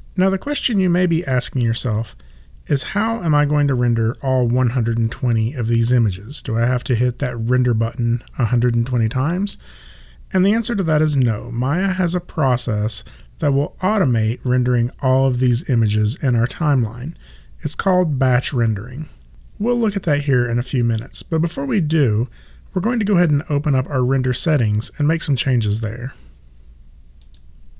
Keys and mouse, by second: 27.2 click.